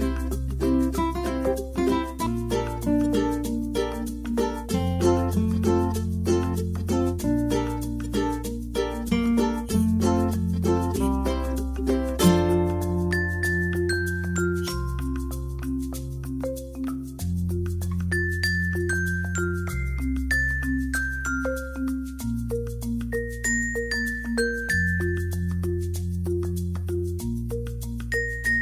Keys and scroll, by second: 14.9-16.1 typing.